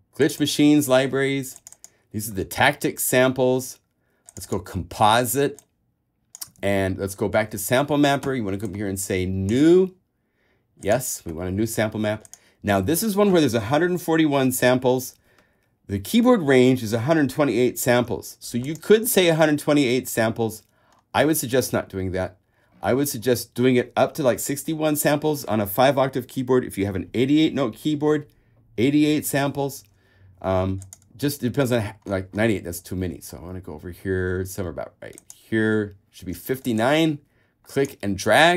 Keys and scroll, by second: 6.8 super+Tab, 19.4 super+a.